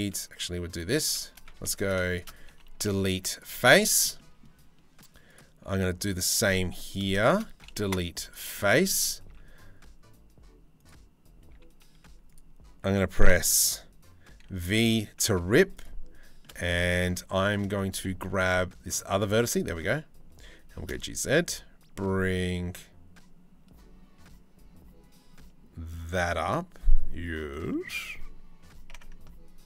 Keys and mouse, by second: 0.4 click, 1.2 3, 1.4 click, 1.7 shift+click, 2.5 Delete, 3.4 shift+click, 3.8 click, 4.9 click, 5.7-6.8 drag, 7.4 Delete, 8.2 click, 8.9 ctrl+r, 11.6 2, 14.0 v, 15.0 1, 15.4 click, 16.3 shift+click, 17.0 shift+click, 17.7 z, 18.5 click, 18.9 z, 20.3 g, 26.5 click.